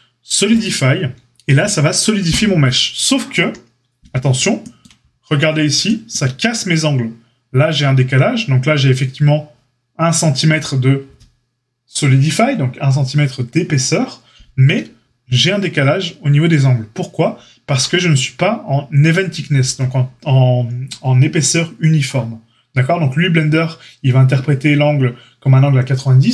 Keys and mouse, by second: 3.3 KP_7.